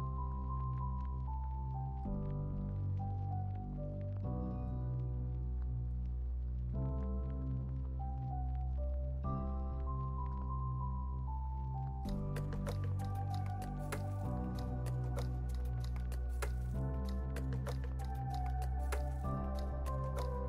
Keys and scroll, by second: 3.4 8, 3.8 0, 4.1 Return, 6.6-8.6 typing, 11.2-14.4 typing, 16.1 z.